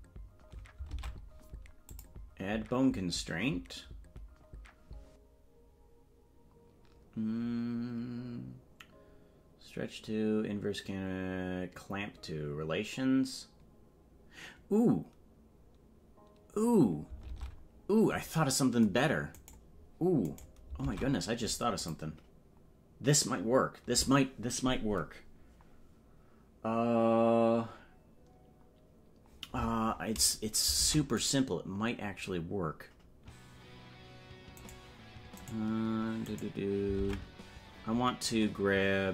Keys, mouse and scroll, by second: 0.9 ctrl+Tab, 1.8-16.6 drag, 19.4 right click, 20.8 ctrl+Tab, 21.7-29.2 drag, 30.9 ctrl+Tab, 31.3 right click, 37.0 ctrl+Tab.